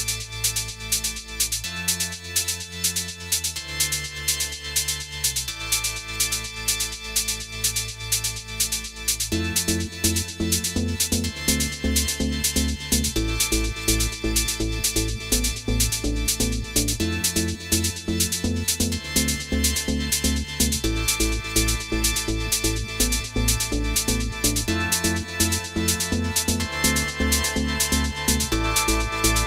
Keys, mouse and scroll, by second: 0.3 click, 2.1 middle click, 7.0 click, 7.7-8.0 scroll down 2, 8.0 middle click, 8.9-9.5 scroll up 4, 9.5 middle click, 12.7-13.0 scroll down 2, 13.0 middle click, 14.9-15.7 scroll up 4, 16.1-17.5 scroll up 2, 17.5 click, 18.6 click, 20.4 click, 21.1 click, 22.1-23.9 scroll down 1, 23.9 click, 23.9 scroll down 1, 24.9 click, 28.1 click, 29.2 click.